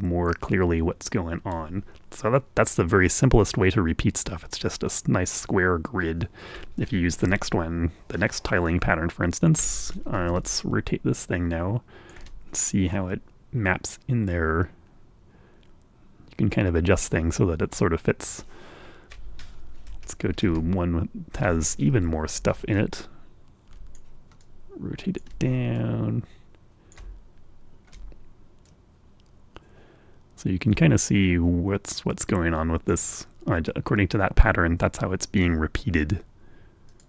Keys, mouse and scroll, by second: 1.2-2.7 drag, 8.3 Right, 11.8-13.7 ctrl+shift+drag, 14.3-17.4 drag, 17.4-18.8 middle drag, 18.8-19.2 scroll up 1, 19.4-19.7 scroll down 1, 21.1 Right, 21.7 Right, 24.0-25.5 ctrl+shift+drag, 25.7-26.7 ctrl+drag, 26.9-28.5 drag, 28.7-29.0 ctrl+scroll up 1, 29.0-29.3 ctrl+scroll down 1, 30.0-32.8 drag, 33.0-34.4 drag.